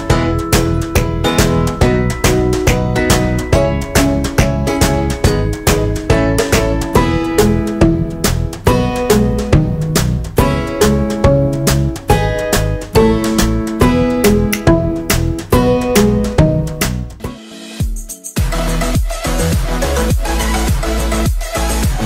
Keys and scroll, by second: 5.1 ctrl+0, 5.5 ctrl+-.